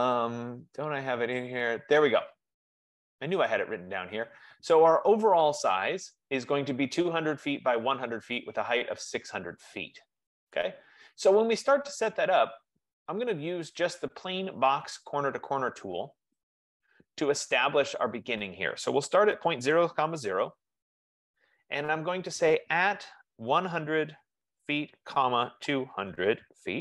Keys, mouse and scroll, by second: 4.7 click, 9.5 F15, 11.2-15.7 drag, 16.7-21.7 drag, 19.4-20.8 typing, 21.0 Return, 23.4-26.8 typing.